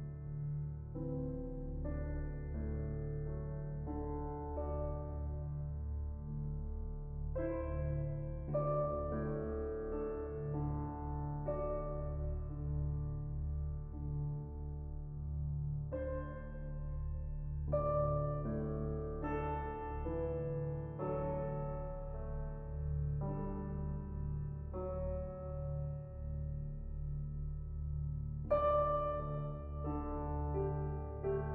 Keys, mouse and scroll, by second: 0.8 click, 1.2 KP_0, 2.2 click, 9.7 click, 10.8 click, 12.0 s, 16.5 click, 17.5-18.3 drag, 19.9-21.0 drag, 21.2 x, 21.7 shift+a, 23.7-24.1 scroll up 1, 24.1 shift+middle click, 24.8-26.7 drag, 26.7-27.2 middle drag, 27.2-28.0 scroll up 2, 28.0-28.7 scroll up 1, 29.6-30.4 scroll down 2, 30.4-31.0 scroll down 2, 31.0-31.5 scroll down 1.